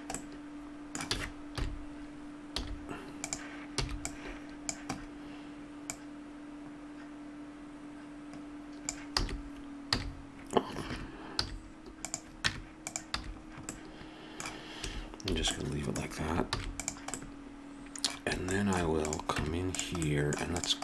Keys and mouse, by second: 1.1 a, 1.5 KP_7, 2.5 z, 3.8 b, 5.8-6.9 drag, 9.1 s, 11.4 z, 12.4 Tab, 13.1 a, 14.8 a, 15.3 a, 16.4 ctrl+s, 19.0 right click, 19.3 Tab.